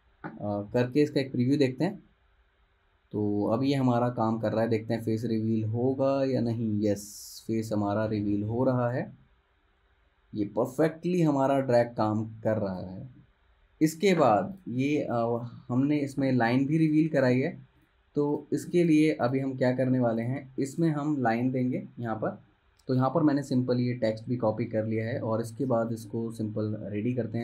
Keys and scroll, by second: 15.1 space, 17.5 z, 18.7 v.